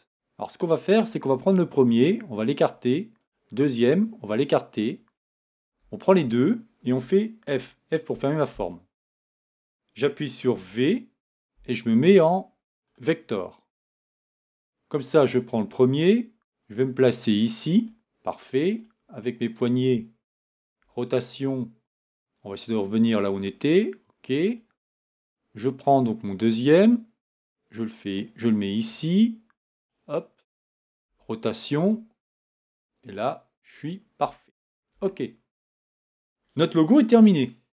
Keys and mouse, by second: 0.9-2.0 right drag, 6.1-7.5 right drag, 7.5 f, 11.0 v, 15.1-17.9 right drag, 18.8-20.8 right drag, 20.8 r, 24.5-28.9 right drag, 29.8-31.0 right drag, 31.0 r, 34.9 Tab.